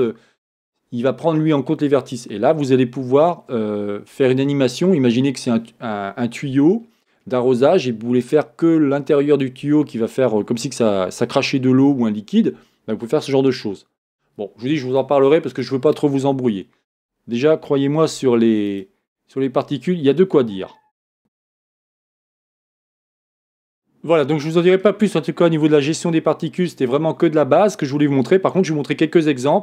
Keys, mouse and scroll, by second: 18.4 Tab, 18.9 click, 20.7-21.2 scroll down 2, 21.2 click.